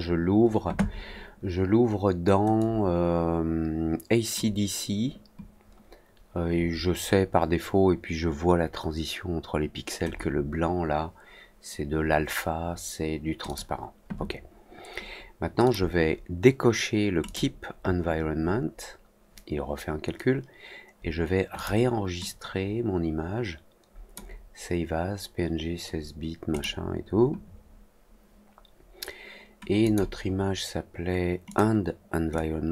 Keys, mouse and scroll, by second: 2.5-4.3 drag, 13.4 click, 15.6 click, 17.2 click, 21.5 click, 22.2-24.1 drag, 26.5 click, 29.8 click, 31.4 click, 32.3-32.7 drag.